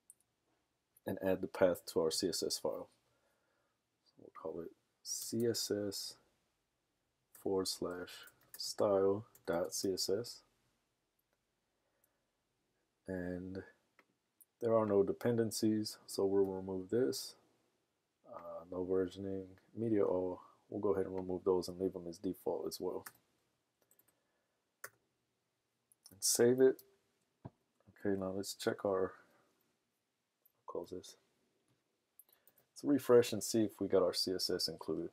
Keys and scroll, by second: 5.1-5.8 typing, 7.1-10.3 typing, 16.4 BackSpace, 23.8-24.8 typing, 26.8 super+s, 28.3 super+Tab, 32.6 super+r.